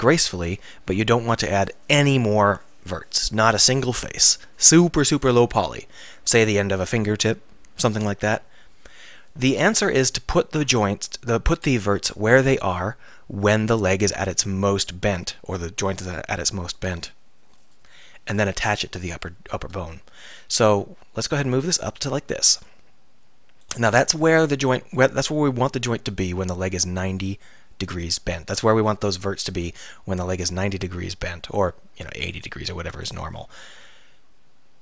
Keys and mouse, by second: 0.2 KP_3, 20.7-23.7 middle drag, 23.7-25.5 right drag, 32.4 right click, 32.9 Tab, 33.7 r.